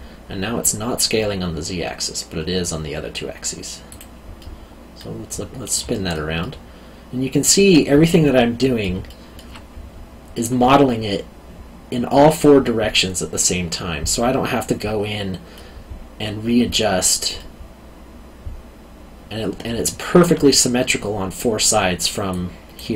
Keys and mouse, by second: 3.9 click, 4.4 middle click, 5.9 alt+middle click, 9.0 alt+middle click, 14.1 middle click, 17.4 middle click, 19.7 alt+middle click, 22.3 click.